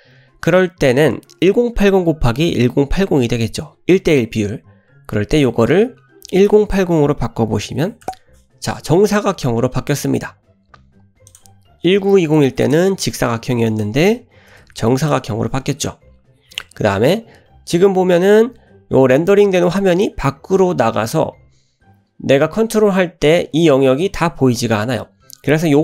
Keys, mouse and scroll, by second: 5.3-8.4 drag, 11.3-15.8 drag, 21.8-22.2 scroll down 1, 22.5 scroll up 1.